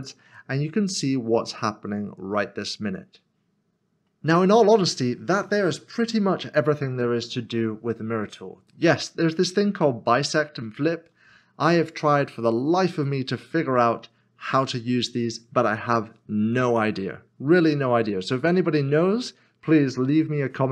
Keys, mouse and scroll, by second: 0.3 middle click, 5.4 double click, 5.5 middle click.